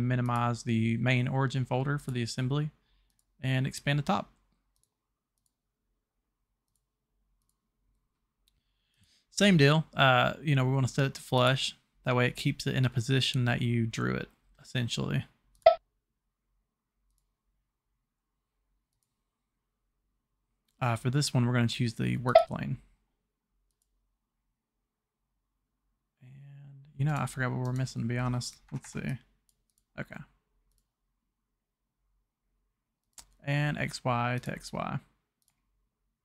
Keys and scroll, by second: 28.6 Escape, 28.8 Escape.